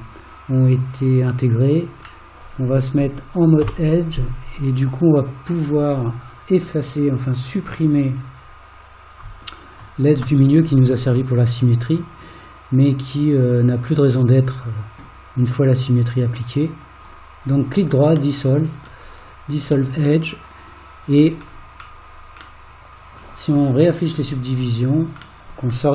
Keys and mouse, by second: 3.7 2, 12.1 right click, 18.4 middle click, 20.0-21.2 middle drag, 22.6 middle click, 25.5 middle click.